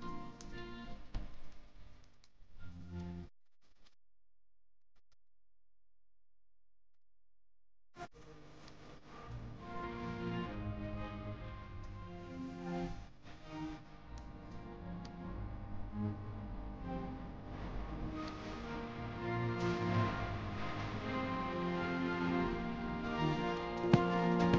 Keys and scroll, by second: 0.0-0.2 typing, 1.8 space, 6.3 shift+Home, 6.7-9.3 typing, 15.3 ctrl+g, 20.3 Escape, 22.0 shift+Home, 23.3-24.5 typing.